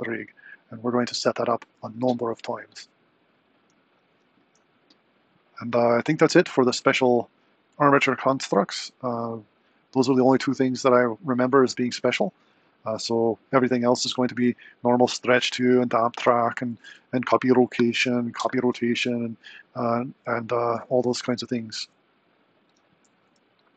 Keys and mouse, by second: 21.0 r.